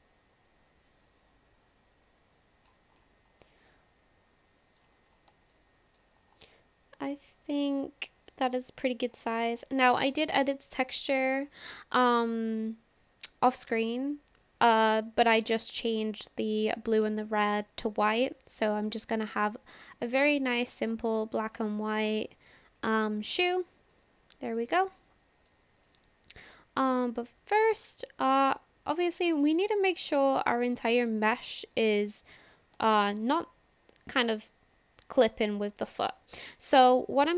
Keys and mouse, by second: 0.6-2.7 middle drag, 3.5-4.8 middle drag, 5.6 shift+middle click, 6.9 click, 8.6-9.2 middle drag, 20.5 click, 22.8 click, 23.9-24.6 middle drag, 25.0-25.5 middle drag, 25.8 click, 27.7-29.3 drag, 29.6 middle click, 31.2 shift+click, 31.3 shift+middle click, 31.7 middle click, 32.9 shift+middle click, 33.3-35.7 middle drag, 36.0 click, 36.3 middle click, 37.0 shift+middle click.